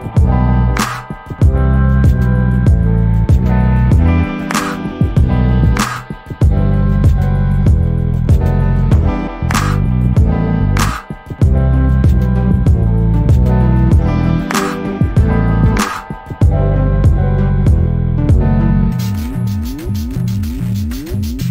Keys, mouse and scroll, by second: 0.0 BackSpace, 0.2 click, 0.7 double click, 1.0 BackSpace, 1.2 click, 1.9-2.3 scroll down 1, 2.3 alt+click, 3.0 alt+middle click, 3.3 alt+click, 4.2 alt+middle click, 8.7 alt+click, 9.5 alt+middle click, 11.3 u, 13.1 click, 13.5 double click, 16.0 click, 17.0 scroll up 1, 17.5 alt+click, 18.5 alt+middle click, 20.7 scroll up 1.